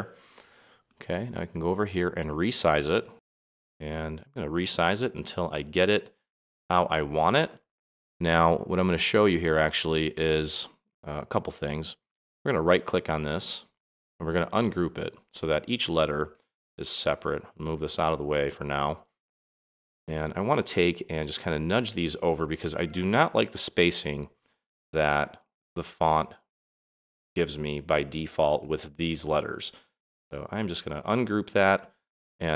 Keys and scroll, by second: 20.9 Right, 23.6 Right, 25.6 Left, 27.2 Right, 29.7 Right.